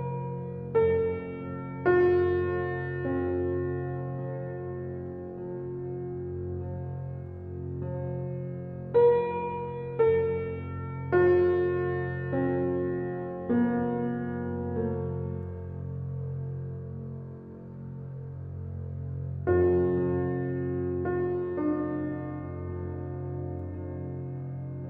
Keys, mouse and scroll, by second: 0.0 ctrl+b, 2.5 click, 3.8-8.8 drag, 8.8 KP_0, 9.4 Tab, 10.1 click, 11.1 click, 11.8 drag, 20.3 alt+middle click, 20.9-21.9 shift+middle drag, 21.9 click, 22.1-22.8 scroll down 1, 22.8 drag, 23.0-23.4 shift+middle drag, 23.4 Tab, 23.7 Tab.